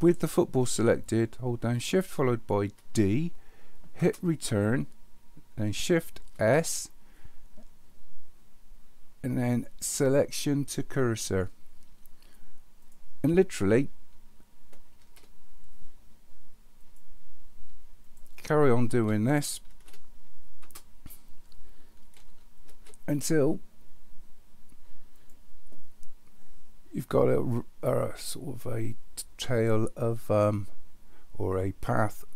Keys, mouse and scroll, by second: 2.8 shift+d, 6.3 shift+s, 15.0 shift+s, 18.0 click, 19.7 shift+d, 22.7 shift+s.